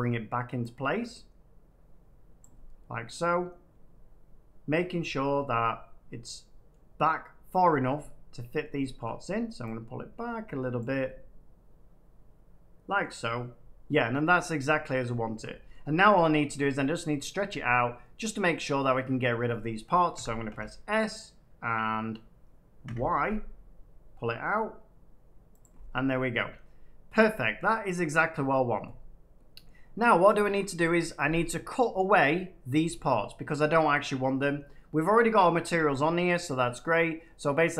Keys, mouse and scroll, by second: 0.3 middle click, 2.3 click, 4.6 middle click, 6.6 middle click, 7.0-7.8 scroll up 1, 7.8 middle click, 8.6 middle click, 8.8 shift+middle click, 10.7 click, 12.9 middle click, 14.1-14.8 scroll down 2, 14.8 middle click, 14.8 scroll up 2, 15.3 shift+middle click, 15.6 middle click, 20.1 s, 20.4 x, 22.8 y, 25.5 click, 27.4-28.3 scroll down 1, 28.4 middle click, 29.6 middle click, 34.3 middle click, 37.5 middle click.